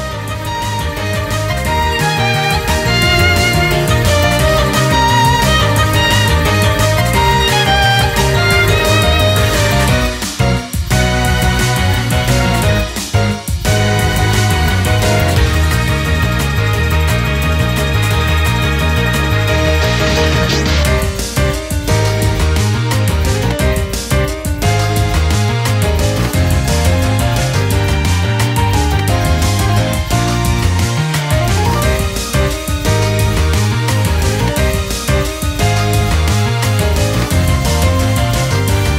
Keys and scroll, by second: 1.6 ctrl+-, 1.7 ctrl++, 3.4 ctrl+-, 6.0 ctrl+-, 10.4 ctrl+-, 10.5 ctrl++, 10.7 ctrl++, 17.9 ctrl+-, 18.1 typing, 18.9 ctrl++, 19.6 ctrl+-, 23.1 ctrl+-, 23.6 typing, 29.5 typing, 29.6 ctrl+-, 32.7 ctrl+-, 33.0 ctrl+-, 33.1 ctrl++, 33.7 ctrl+-, 33.8 ctrl++, 34.6 ctrl+u, 35.1 typing, 36.3 typing, 38.1-38.6 typing.